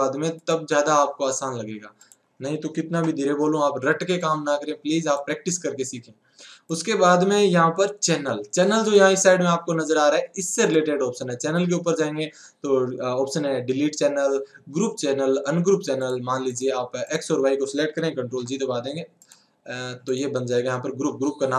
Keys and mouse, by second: 0.5-2.1 drag, 2.9 alt+a, 4.3-8.6 drag, 9.6-12.3 drag, 17.6-19.2 drag, 19.2 ctrl+g.